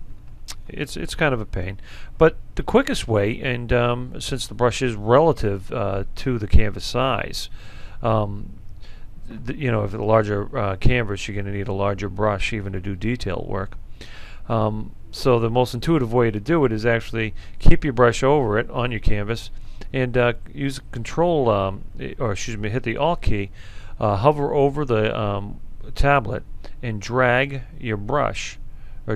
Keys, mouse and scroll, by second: 26.3-29.1 alt+right drag.